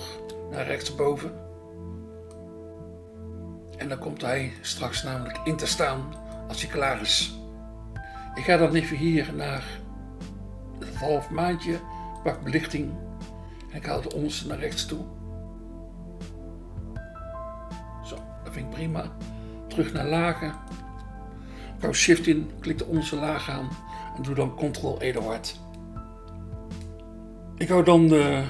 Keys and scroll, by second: 0.1 BackSpace, 12.8 BackSpace, 14.1 BackSpace, 20.8 BackSpace, 25.2 ctrl+e.